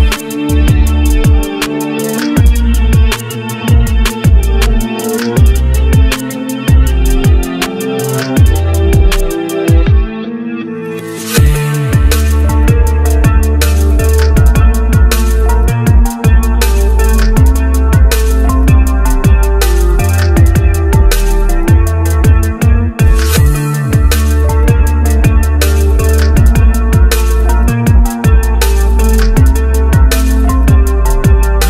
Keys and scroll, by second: 9.7 ctrl+c, 11.4 ctrl+v.